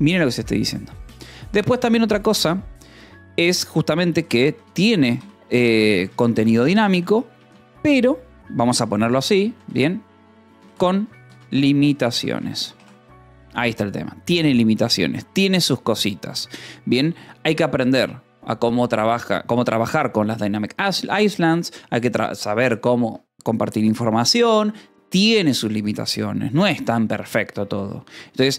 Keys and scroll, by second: 4.1-11.8 typing, 12.3 Escape, 13.3 ctrl+s.